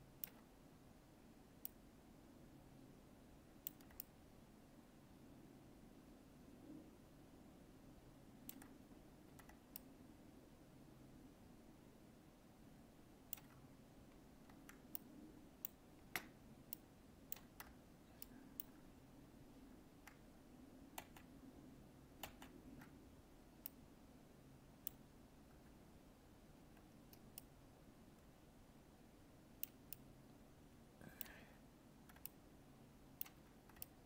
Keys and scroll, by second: 21.0 ctrl+z.